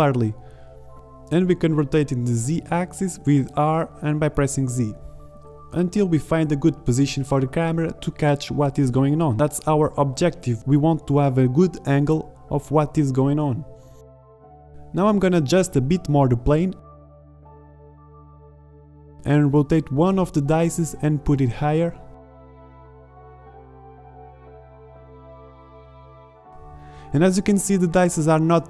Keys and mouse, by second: 2.3 r, 8.6 KP_0, 10.8 alt+a, 15.0 shift+Left, 15.2 alt+a, 15.4 r, 16.2-17.2 drag, 17.2 s, 18.8 KP_Decimal, 19.9 r, 21.0 drag, 22.3-22.8 drag, 22.3-22.8 right drag, 22.8-24.0 drag, 24.0 Right, 24.1 KP_0, 25.3 shift+Left, 25.3 z, 26.0 alt+a.